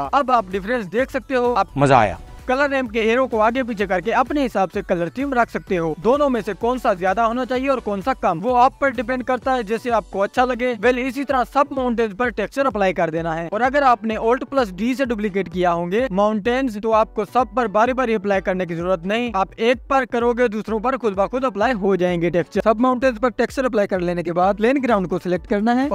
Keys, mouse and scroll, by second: 0.7 click, 1.2-1.7 scroll up 2, 1.7-5.8 drag, 5.8 right click, 6.5-7.5 drag, 10.4 click, 11.3 Tab, 13.4 u, 14.4 Tab, 15.3 click, 22.6 ctrl+z, 24.7-25.7 scroll up 1, 25.7 click.